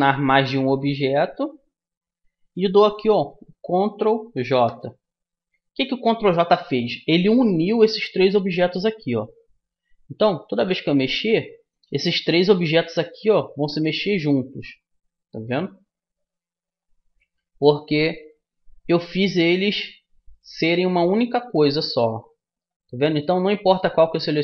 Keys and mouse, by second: 1.1-2.9 right drag, 4.5 ctrl+j, 7.0-9.7 middle drag, 9.7-21.9 drag, 21.9-24.4 right drag.